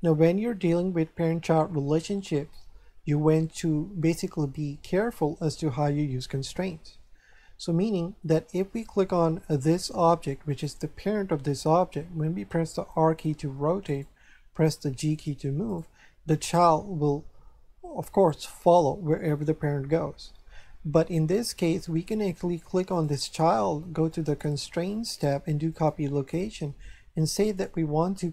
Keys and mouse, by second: 7.8 shift+middle click, 9.4 right click, 12.8 r, 14.2 right click, 15.0 g, 15.7 right click, 22.9 right click, 24.1 click, 27.4 click.